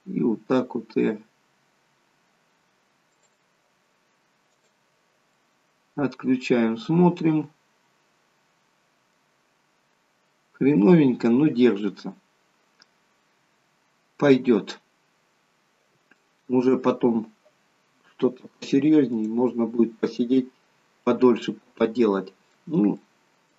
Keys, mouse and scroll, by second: 0.2 r, 4.5 click, 5.2 middle click, 10.8 middle click, 14.9 scroll down 2, 16.0 shift+middle click, 17.1 scroll up 2, 19.0 click, 19.6 scroll down 1, 20.2 middle click, 22.8 shift+middle click.